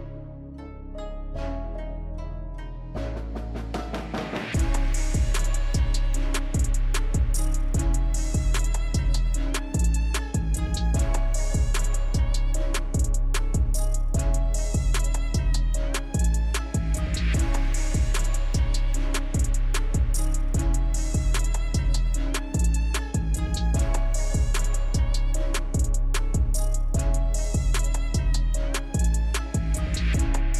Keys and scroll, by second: 27.9 ctrl+z.